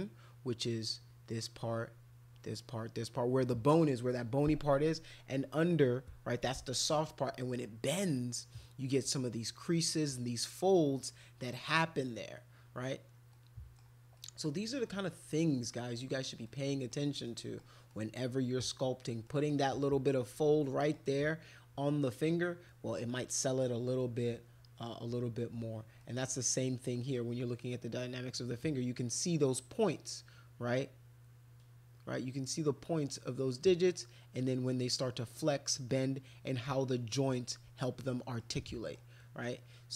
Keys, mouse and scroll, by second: 13.3 middle click, 14.2 middle click, 16.4 middle click, 17.2 middle click, 17.9 middle click, 19.3 middle click, 20.8 middle click, 22.7 middle click, 23.2 middle click, 24.0 middle click, 26.0 middle click, 37.4 middle click, 38.1 middle click, 38.7 middle click, 39.2 middle click.